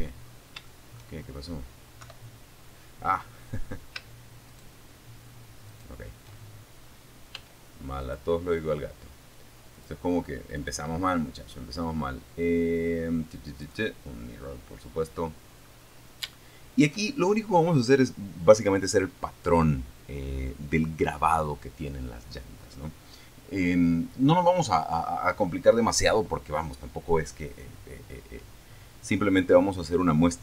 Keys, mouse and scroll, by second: 0.2 KP_7, 2.6 shift+right click, 3.8 shift+right click, 5.5 x, 6.2 click, 7.9 click, 8.8 click, 11.8 click, 13.6-14.0 scroll up 2, 14.5 shift+click, 15.4 shift+scroll up 3.